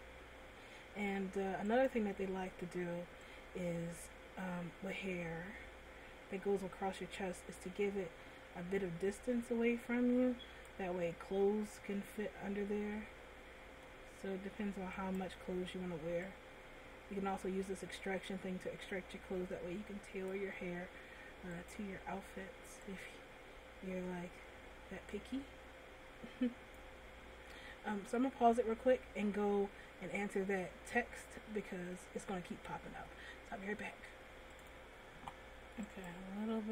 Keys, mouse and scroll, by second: 2.1 right click, 3.5 click, 11.3 middle click, 15.3 right click, 16.6 click, 22.1 right click, 23.3 click, 27.8 middle click, 32.1 middle click, 36.3 right click.